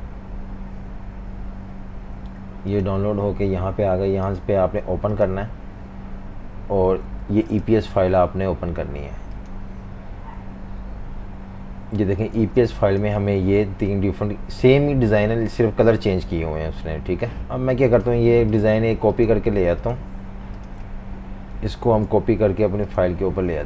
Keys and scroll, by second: 12.4 v, 12.5 space, 21.8 super+c.